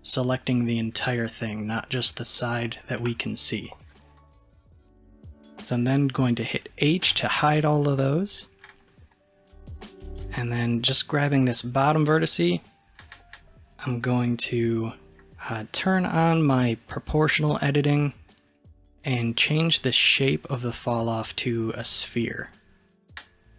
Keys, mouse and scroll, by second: 3.1 KP_3, 7.1 h, 9.1 click, 17.4 click, 19.7-22.8 drag.